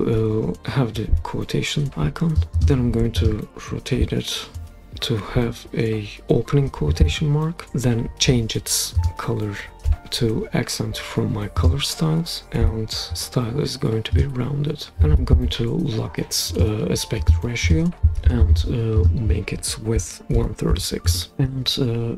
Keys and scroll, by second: 19.7-21.2 typing.